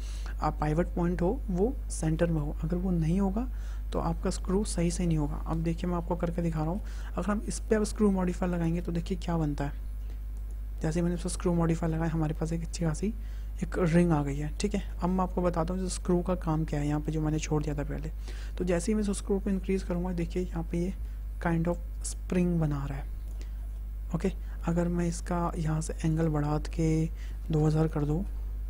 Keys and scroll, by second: 27.1 KP_2, 27.4 KP_0, 28.1 Return.